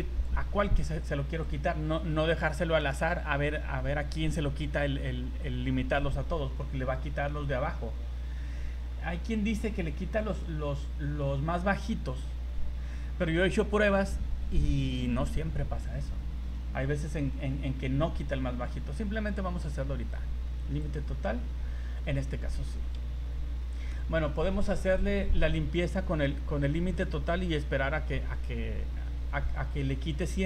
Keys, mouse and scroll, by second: 1.4 click, 9.5 click, 20.8 click, 22.7 ctrl+z.